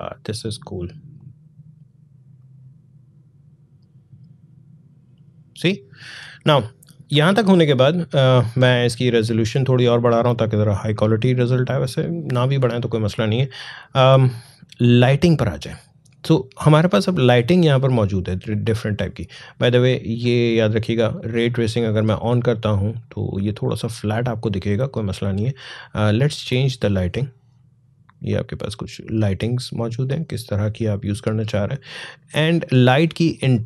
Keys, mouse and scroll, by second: 0.9-8.6 drag, 14.8 click, 23.4 click, 32.8-33.6 drag.